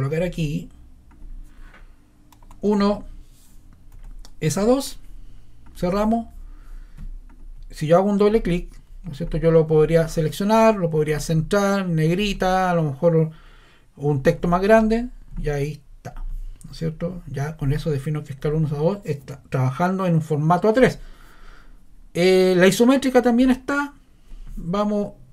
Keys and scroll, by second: 2.2-4.0 typing.